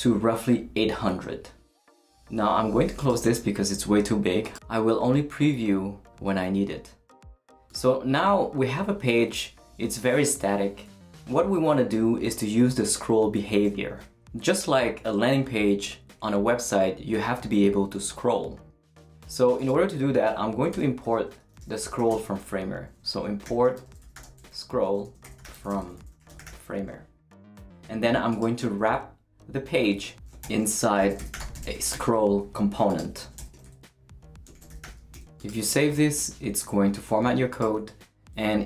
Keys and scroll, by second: 20.7 Return, 21.1-26.9 typing, 30.4-35.4 typing, 35.8 super+s.